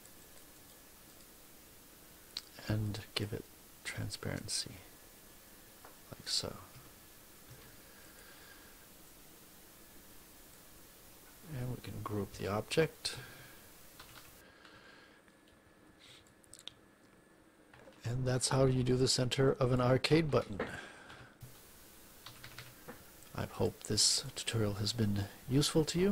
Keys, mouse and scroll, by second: 1.0 click, 2.8 click, 4.0 click, 6.6 F1, 7.4 Escape, 8.0 click, 9.0-10.6 drag, 12.0 ctrl+g, 12.8 click, 13.9 -, 16.2-19.8 drag, 21.0 3, 22.2 -, 23.4 click, 24.0 click, 24.6 click.